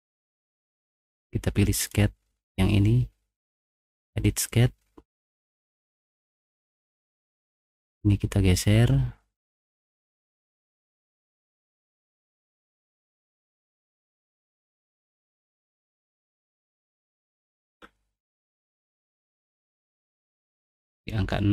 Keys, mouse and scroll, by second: 1.8 click, 5.4 middle click, 5.4 scroll, 5.7 middle click, 6.0 middle click, 6.3 middle click, 6.5 middle click, 6.7 middle click, 7.6 click, 8.2 click, 11.6 click, 12.7 click, 13.0 click, 14.1 click, 14.5 middle click, 15.1 click, 16.3 click, 17.1 5, 17.7 Return, 20.8 click, 21.0 click.